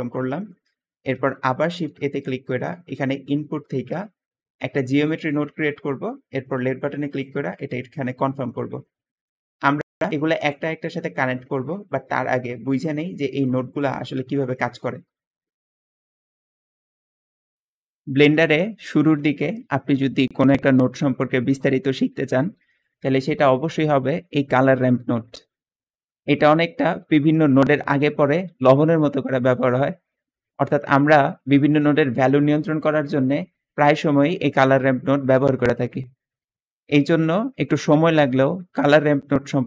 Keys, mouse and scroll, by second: 1.5 shift+a, 1.6 shift+a, 11.8 middle click.